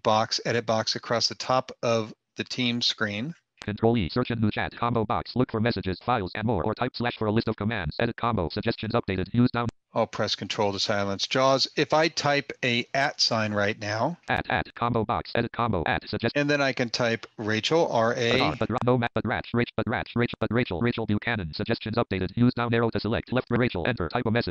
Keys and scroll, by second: 12.2 @, 13.2 @.